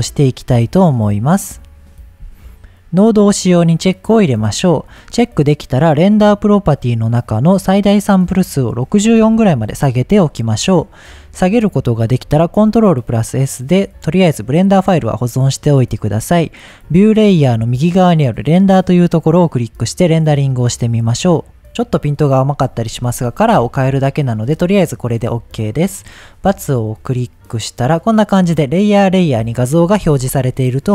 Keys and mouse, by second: 3.2 click, 8.2-10.2 drag, 12.2 ctrl+s, 19.6-26.9 drag.